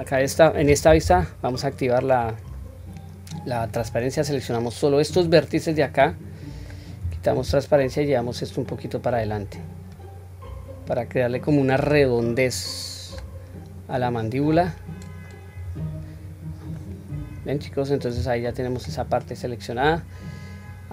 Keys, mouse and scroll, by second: 3.6-5.2 drag, 5.7-6.7 middle drag, 7.0 q, 7.9-11.9 drag, 12.2-13.2 middle drag, 14.5 click, 15.1 click, 16.8-18.8 middle drag, 19.3-20.9 middle drag.